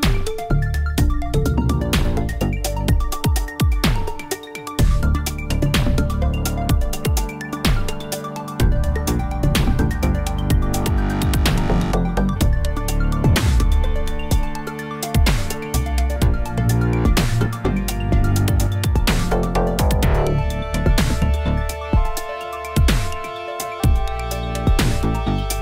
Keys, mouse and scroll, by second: 1.0 r, 1.6-2.0 scroll down 3, 2.0 r, 4.4 alt+middle click, 4.9 alt+middle click, 5.3-5.7 scroll up 4, 5.7 r, 7.4 shift+middle drag, 7.6 r, 9.4 r, 11.5 shift+middle drag, 11.7-13.8 scroll up 4, 13.8 ctrl+a, 13.9 Tab, 14.3 g, 16.2 middle click, 16.6 scroll down 4, 16.8 shift+middle click, 17.5 click, 17.8 shift+middle click, 18.0-18.5 scroll up 1, 18.7 shift+click, 19.0 g, 20.3 g, 23.9 click, 24.6 g.